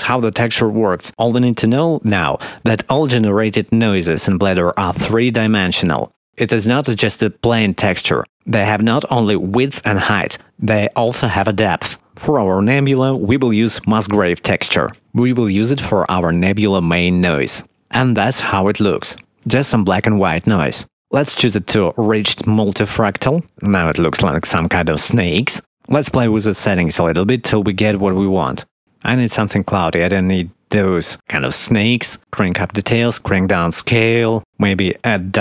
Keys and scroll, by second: 12.1 shift+a.